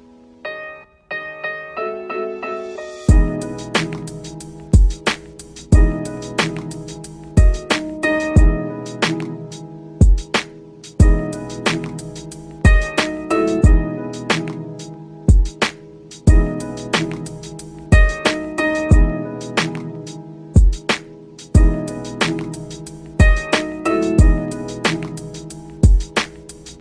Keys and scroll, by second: 16.9 ctrl+c, 17.6 ctrl+v, 23.7 ctrl+shift+q.